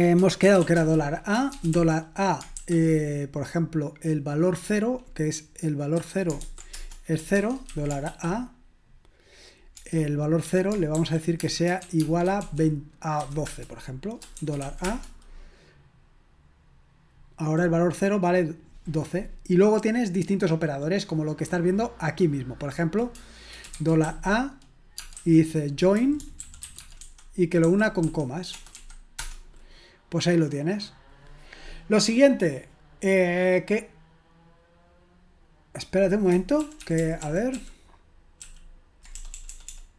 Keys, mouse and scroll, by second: 0.2-2.5 typing, 6.5-8.1 typing, 11.8-14.9 typing, 13.4 Return, 23.8 typing, 25.1-28.7 typing, 29.2 Return, 36.6 ctrl+p, 36.8 ctrl+p, 37.0 ctrl+p, 37.2 ctrl+p, 39.2 BackSpace, 39.3 BackSpace, 39.5 BackSpace, 39.7 BackSpace.